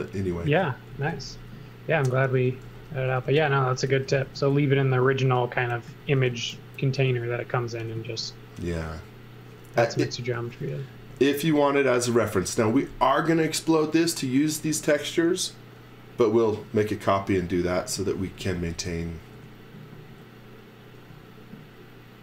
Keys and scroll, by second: 0.4-4.6 typing, 5.9 z, 7.0 x, 8.0 z, 10.0 x, 11.1-12.7 typing, 17.7-19.8 typing.